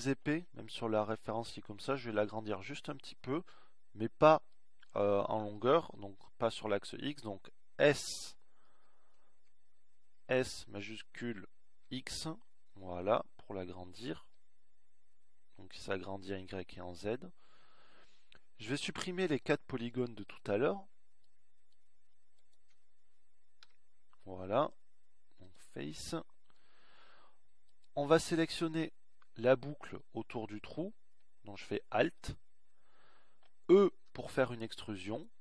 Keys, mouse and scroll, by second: 9.6 s, 18.3-20.3 middle drag, 20.3-22.0 drag, 23.3 Delete, 33.8 e.